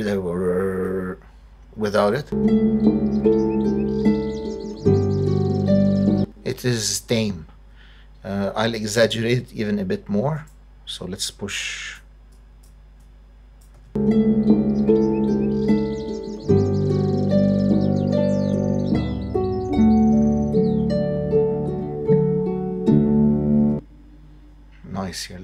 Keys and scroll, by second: 2.1 space, 6.0 space, 13.7 space, 23.6 space.